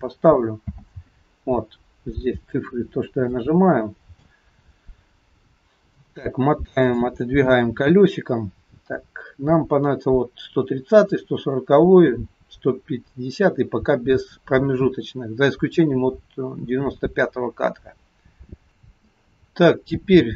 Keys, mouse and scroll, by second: 0.6 n, 2.4-3.3 scroll up 5, 3.4 shift+middle click, 5.5 scroll down 2, 5.9 scroll up 1, 6.0 middle click, 7.3-8.5 scroll up 6, 8.5 scroll down 1, 9.2-10.9 scroll down 2.